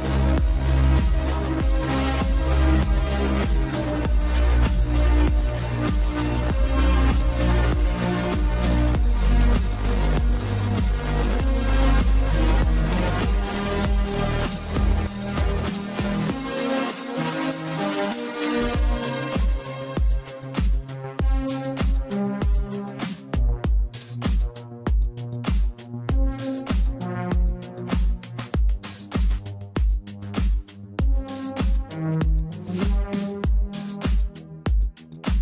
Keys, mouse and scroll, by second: 2.2 scroll up 2, 4.6 shift+click, 5.4 shift+click, 6.7 shift+click, 7.6 shift+click, 8.4 scroll down 4, 8.9-10.7 middle drag, 10.7 shift+click, 11.5 shift+click, 13.2 KP_1, 14.3-15.3 scroll up 1, 15.3-16.9 scroll up 1, 16.9 shift+d, 25.6 shift+z, 27.3 scroll down 2, 27.8 click, 28.5 scroll down 1, 29.3-29.9 scroll down 1, 29.9 click, 30.1 scroll down 1, 30.3-31.6 middle drag, 32.1-32.6 scroll up 1, 32.6-33.3 middle drag, 33.3 click, 33.8 shift+click, 34.3 shift+drag, 34.8 shift+drag, 35.2 shift+click.